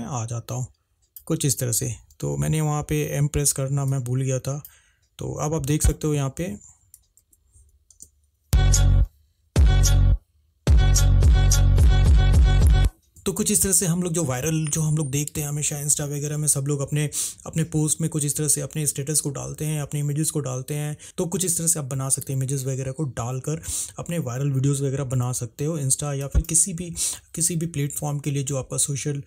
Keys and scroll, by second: 2.5 -, 7.4 ctrl+`, 13.1 space.